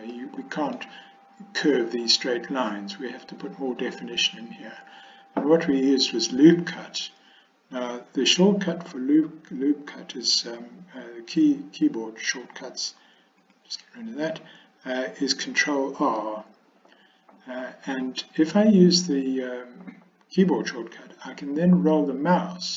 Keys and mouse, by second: 0.2-0.9 middle drag, 13.4 click, 16.0 ctrl+r.